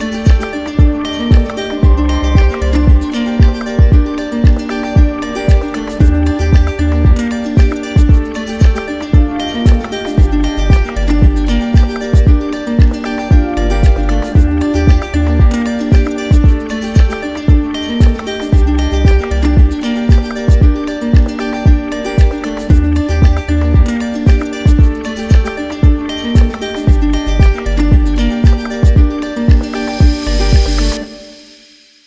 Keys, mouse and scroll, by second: 0.1 alt+click, 0.5 alt+click, 1.1 alt+click, 1.5 alt+click, 2.2 alt+click, 2.7 alt+click, 3.2 alt+click, 3.5 alt+click, 3.9 alt+click, 4.3 alt+click, 4.7 alt+click, 5.5 alt+click, 5.8 alt+click, 6.1 alt+click, 6.3 alt+click, 6.7 alt+click, 7.3 alt+click, 7.6 alt+click, 8.1 alt+click, 8.4 alt+click, 8.6 alt+click, 9.3 right click, 10.1 alt+click, 10.5 alt+click, 11.0 alt+click, 11.4 alt+click, 12.4 alt+click, 12.8 alt+click, 13.0 alt+click, 13.3 alt+click, 13.6 alt+click, 13.9 alt+click, 14.3 alt+click, 14.5 alt+click, 15.0 alt+click, 15.3 alt+click, 15.6 alt+click, 15.9 alt+click, 16.1 alt+click, 16.5 alt+click, 16.8 alt+click, 17.1 alt+click, 17.4 alt+click, 17.7 alt+click, 18.0 alt+click, 18.3 alt+click, 19.1 alt+click, 19.4 alt+click, 19.8 alt+click, 20.2 alt+click, 20.5 alt+click, 20.7 alt+click, 21.3 click, 22.0 alt+click, 22.3 alt+click, 22.6 alt+click, 22.9 alt+click, 23.6 alt+click, 24.3 click, 25.6 right click, 27.3 click, 28.1 ctrl+z, 28.8 alt+click, 29.3 alt+click, 30.5 ctrl+z, 31.3 right click.